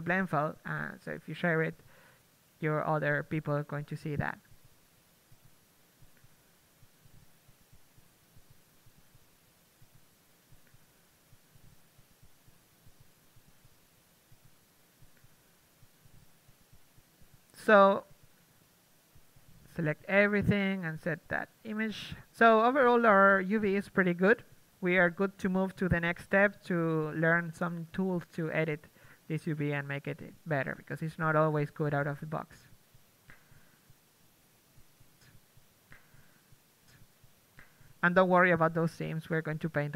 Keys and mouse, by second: 10.0 Tab, 10.3 Tab, 10.8 Tab, 11.0 Tab, 11.4 Tab, 11.5 Tab, 11.7 Tab, 12.7 Tab, 12.9 Tab, 13.1 Tab, 15.0 a, 15.2 a, 15.3 a, 15.7 a, 15.8 Tab, 16.1 Tab, 16.7 Tab, 18.2 a, 18.3 Tab, 18.5 a, 18.9 Tab, 19.1 Tab, 19.4 Tab, 20.2 Tab, 20.5 a, 20.9 KP_3, 21.4 Tab, 21.8 a, 22.0 a, 23.1 Tab, 23.3 shift+space, 29.5-30.8 middle drag, 30.8 KP_3, 32.5 KP_1, 33.2-34.4 drag, 34.2 Tab, 35.6 a, 36.7 l, 38.2 shift+space.